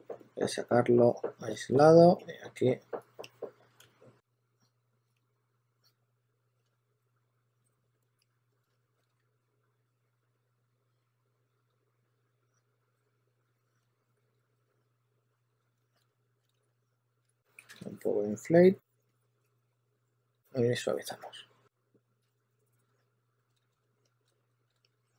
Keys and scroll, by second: 3.6 2, 8.2 2, 8.7 2, 9.1 2, 12.9 2, 14.4 2, 14.6 2, 15.6-16.6 typing, 17.6 super+z, 21.1 2, 22.6-25.1 typing.